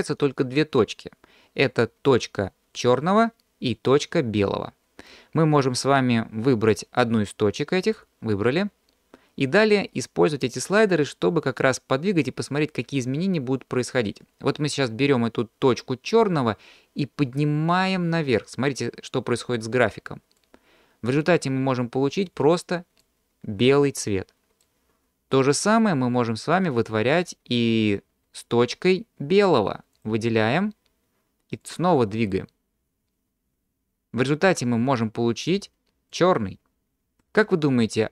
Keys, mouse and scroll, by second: 7.9 drag, 8.6-9.8 scroll down 2, 10.5-13.0 drag, 15.6-18.1 drag, 20.4-22.3 drag, 23.0 click, 25.7-26.9 drag, 30.0 click, 31.6-35.5 drag, 36.1 click.